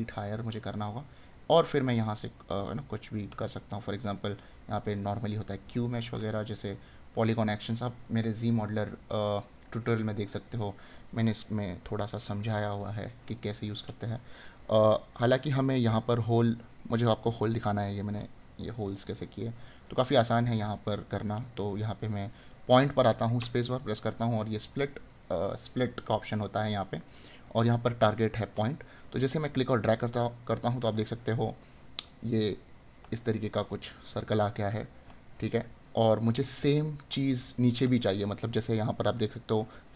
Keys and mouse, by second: 3.1 right click, 6.6 right click, 14.6 right click, 16.3 right click, 18.9 right click, 33.0 right click, 37.0 right click.